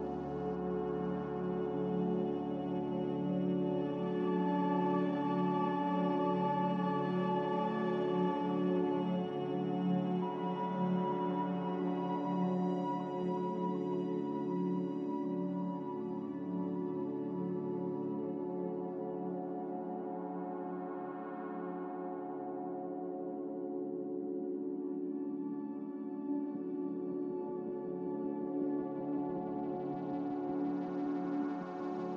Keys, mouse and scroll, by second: 3.4 F9, 9.5 a, 12.9 q, 22.3 z.